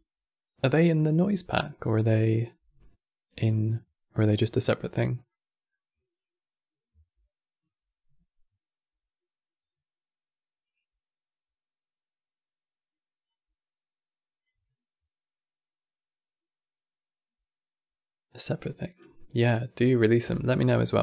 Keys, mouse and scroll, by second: 3.3-5.0 drag, 5.0-8.0 middle drag, 14.9-17.6 drag.